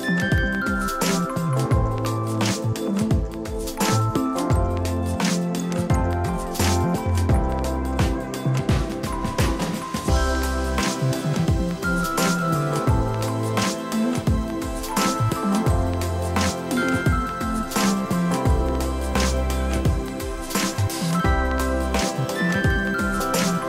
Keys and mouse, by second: 2.7 right click, 3.6 click, 5.0 click, 6.4 alt+y, 6.7 ctrl+click, 8.0 alt+y, 8.2 click, 8.7 Delete, 8.8 click, 9.0 Delete, 10.9 alt+y, 11.8 click, 12.8 ctrl+shift+super+y, 13.0 click, 13.6 click, 14.5 alt+y, 14.7 click, 16.1 click, 19.3 click, 20.4 Return, 21.3 click.